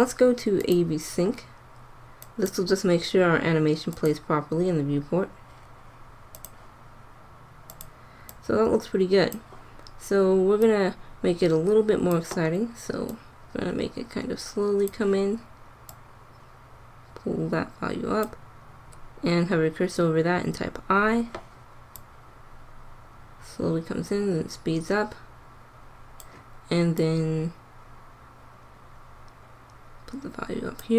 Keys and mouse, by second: 10.1 middle click, 12.2 middle click, 15.0 middle click, 17.8-20.6 middle drag, 20.6 |, 21.9-23.8 drag, 26.9-28.6 drag.